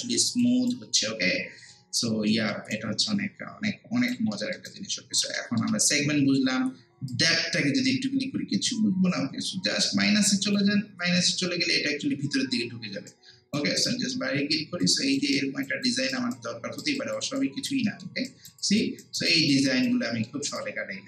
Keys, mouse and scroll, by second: 0.7-2.3 alt+right drag, 2.3 alt+middle click, 2.7-4.3 alt+right drag, 4.3 alt+middle click, 4.7 alt+right click, 5.4 alt+middle click, 7.1-12.3 drag, 12.3 scroll down 1, 12.6-12.9 scroll up 1, 13.1 alt+right click, 13.8 click, 14.4 scroll up 1, 14.8 alt+click, 15.4 alt+right click, 15.8 alt+click, 16.3 alt+right click, 17.0 alt+click, 17.4 alt+right click, 17.9 alt+middle click, 18.3 alt+right click, 18.7 alt+click, 19.0 alt+right click, 19.3 alt+click, 19.7 alt+right click, 20.1 alt+middle click, 20.5-21.0 drag.